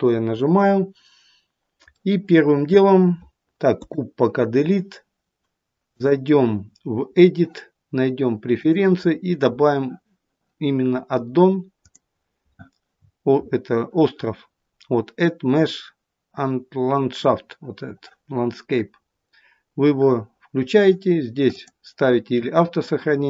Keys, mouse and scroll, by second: 2.0 middle click, 3.8 Delete.